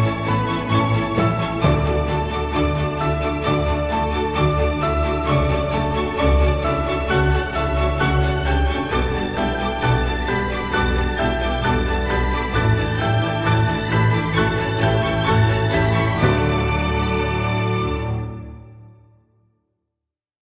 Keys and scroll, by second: 4.6 space.